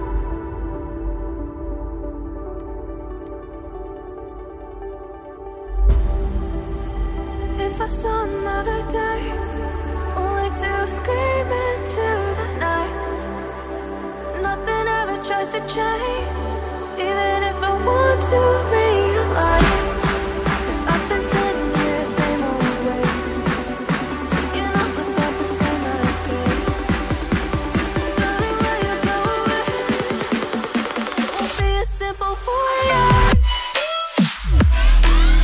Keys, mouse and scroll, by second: 3.9 Down, 4.0 Down, 4.3 Down, 4.4 Down, 4.6 Down, 4.7 Down, 4.9 Down, 5.1 Down, 5.3 Down, 7.5 Down, 8.9 Up, 9.1 Up, 9.2 Up, 9.3 Up, 9.4 Up, 9.6 Up, 11.5 Down, 11.7 Down, 12.0 Down, 12.1 Down, 12.8 Down, 14.9 Down, 15.5 Down, 15.6 Down, 16.4 Down, 19.8 Down, 21.7-22.4 ctrl+scroll down 1, 24.4 right click, 31.5-32.6 ctrl+scroll up 1, 32.8-33.4 ctrl+scroll up 1, 33.6-35.1 ctrl+scroll up 1, 35.2-35.4 scroll up 1.